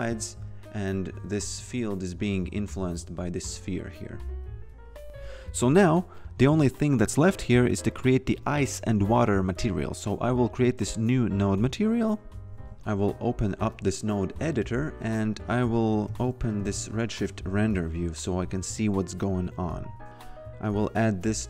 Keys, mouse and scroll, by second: 0.3 F1, 1.0 click, 4.8-5.7 typing, 6.2 click, 11.1 click, 12.8 click, 15.4-17.3 typing, 18.3 click, 20.7 click.